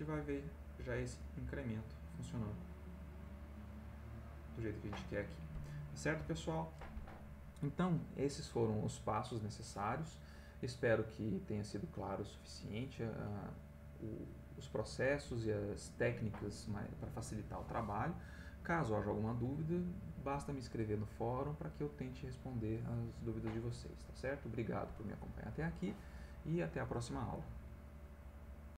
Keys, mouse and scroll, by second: 5.8 click, 28.6 click.